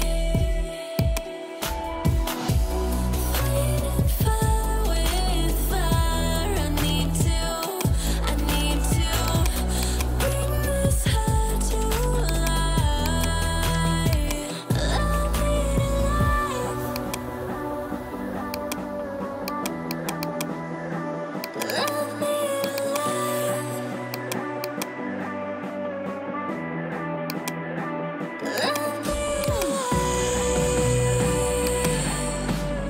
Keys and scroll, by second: 15.2 ], 18.9 [.